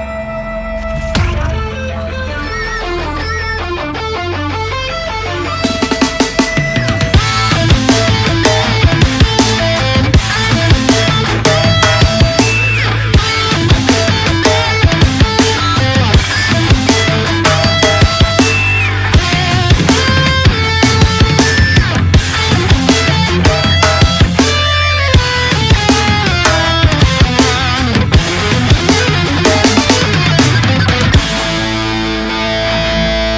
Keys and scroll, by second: 5.0 Return, 16.1 ctrl+u, 17.4 ctrl+c.